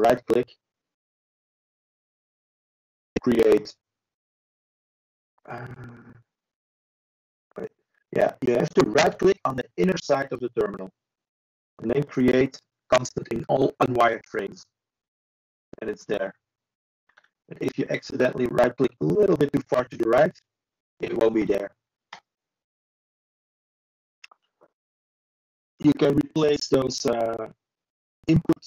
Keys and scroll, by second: 7.8 ctrl+e, 27.8 ctrl+space.